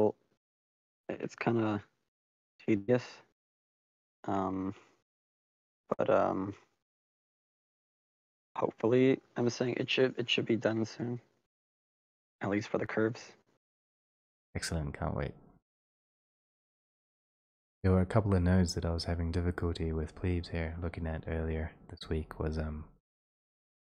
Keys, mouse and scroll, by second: 9.9 click, 12.4 click, 12.5-13.2 scroll, 13.2-13.8 scroll, 13.8 click, 14.9 middle click, 18.2-18.7 scroll, 21.9 middle click.